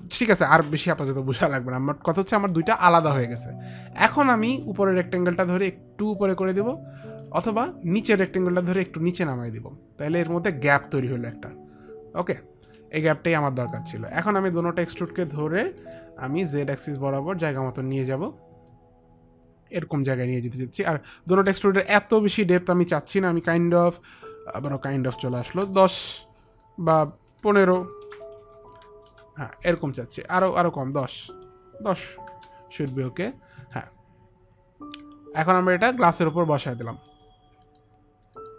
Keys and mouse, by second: 0.5 click, 4.6 click, 6.1 click, 8.0 ctrl+z, 8.0 click, 8.7 ctrl+z, 8.7 click, 10.0 click, 11.8 ctrl+alt+z, 11.8 alt+click, 14.2 alt+click, 15.1 ctrl+click, 16.3 middle click, 16.9 middle click, 19.2 ctrl+click, 22.9 click, 26.0 KP_1, 26.1 click, 26.1 KP_0, 26.1 KP_1, 27.2-27.8 typing, 32.6 KP_1, 35.1 click, 37.0 Return, 37.0 click, 38.2 middle click, 38.2 click.